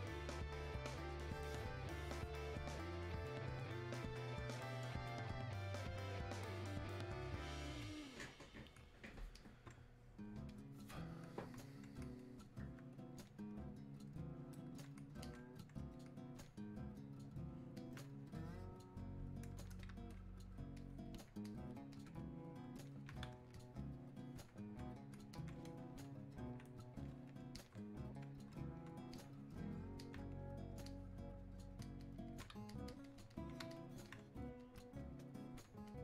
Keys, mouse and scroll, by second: 8.8 click, 9.4-36.0 alt+drag.